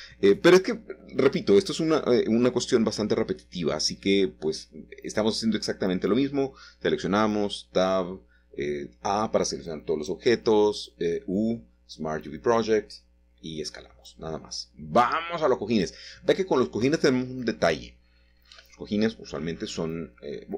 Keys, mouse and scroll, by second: 0.9 middle click, 1.6 Tab, 2.1 click, 2.6 Tab, 3.2 a, 4.9 u, 5.5 click, 6.5 click, 8.0-8.7 typing, 10.2 click, 10.6 Tab, 11.1-11.6 scroll down 1, 11.6 middle click, 12.7 shift+middle click, 13.7 scroll down 1, 13.7 scroll up 1, 13.9 middle click, 14.5-15.5 scroll up 3, 14.9 shift+middle click, 15.5 shift+middle click, 15.9 click, 17.7 middle click, 18.7-19.3 scroll down 2, 20.2 middle click.